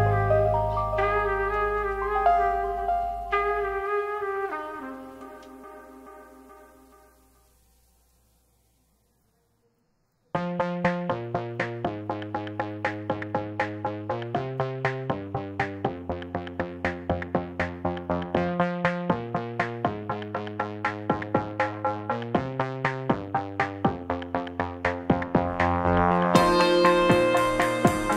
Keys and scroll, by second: 2.0 2, 5.0 ctrl+c, 5.1 ctrl+v, 13.1 ctrl+[, 14.5 space, 20.0 z, 21.5 2, 23.6 1, 24.2 KP_Decimal, 24.3 KP_5, 24.3 Return, 26.7 KP_1, 26.9 KP_Decimal, 26.9 KP_5, 27.2 Return.